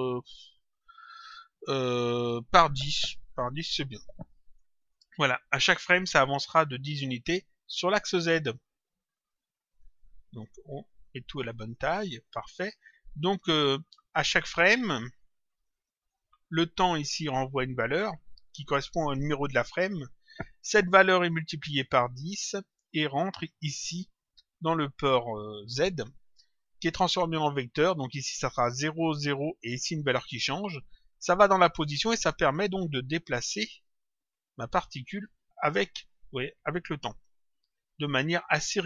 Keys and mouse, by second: 3.4 click, 4.8 click, 6.4 click, 9.4 click, 11.4 ctrl+click, 15.5 ctrl+click, 20.2 click, 21.6 click, 32.4 click, 35.4 click, 38.4 click.